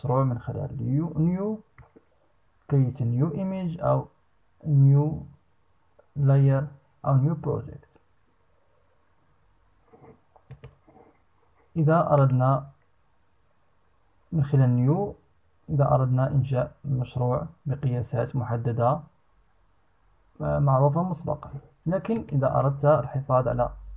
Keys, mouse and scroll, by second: 10.1 click, 11.7 click, 21.7 click.